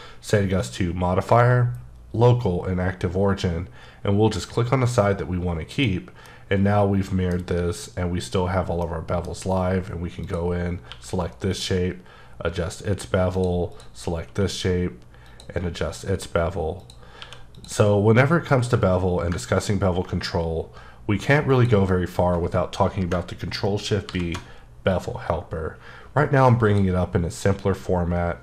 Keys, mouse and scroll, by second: 5.7 click, 6.2 middle click, 8.8 middle click, 10.2 click, 10.8 q, 11.5 click, 13.3 click, 13.7 click, 14.3 q, 15.2 click, 16.8 click, 17.2 q, 17.5 click, 19.6-20.1 ctrl+scroll up 2, 21.5 click, 23.1 shift+click, 24.0 shift+b, 24.9 click.